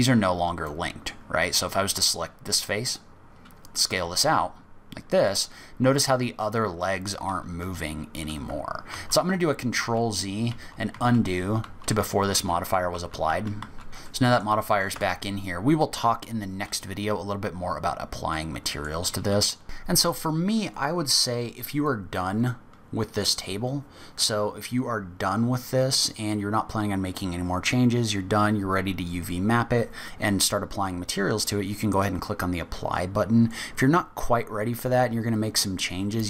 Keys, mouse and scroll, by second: 0.2-1.3 scroll up 3, 0.6 middle click, 1.3-1.8 scroll up 2, 2.8 click, 3.2-3.8 scroll down 6, 3.8 s, 8.9 ctrl+z, 9.2 ctrl+z, 9.7 ctrl+z, 10.4 ctrl+z, 10.9 ctrl+z, 11.6 ctrl+z, 12.4 ctrl+z, 12.9 ctrl+z, 13.2 ctrl+z, 13.6-14.0 ctrl+z, 14.0 middle click, 14.9 Tab, 18.2 middle click, 20.4 click, 21.2-21.5 scroll up 1, 21.6 middle click, 33.3 middle click, 33.7-34.1 scroll up 2, 34.5-34.8 scroll down 1, 35.0 scroll up 1.